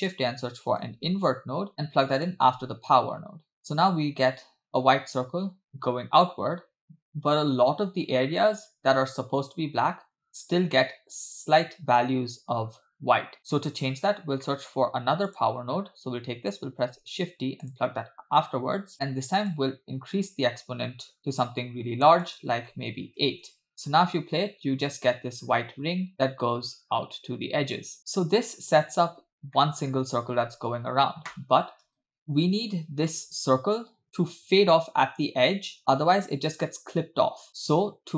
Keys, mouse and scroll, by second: 5.7 space, 6.3 space, 6.8 space, 7.1 space, 10.6-13.3 scroll up 2, 13.4-14.4 scroll down 3, 14.5 middle click, 15.4 click, 16.9 shift+d, 18.9 space, 19.6-23.4 shift+drag, 23.7 space, 23.9 space, 26.1 space, 28.0 click, 29.0-29.5 scroll down 2, 29.6-29.9 middle drag, 31.9 space, 34.2 space, 34.6 space, 36.2 space.